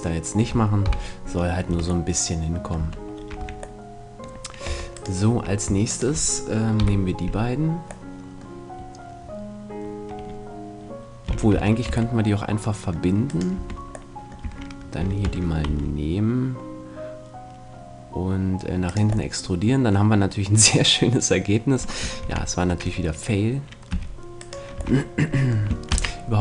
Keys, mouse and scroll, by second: 0.9 KP_1, 1.3 middle click, 1.7 Tab, 2.1 middle click, 2.7 Tab, 3.4 a, 4.7 Tab, 4.9-6.8 right drag, 6.8 KP_7, 11.3 f, 11.5 a, 11.9 Tab, 12.1-13.3 middle drag, 13.3-15.1 right drag, 13.5 Tab, 13.5-16.8 middle drag, 14.4 a, 15.0 e, 19.3-20.6 drag, 20.6 middle click, 22.2 ctrl+z, 23.9 g, 24.5 right click, 24.7 a.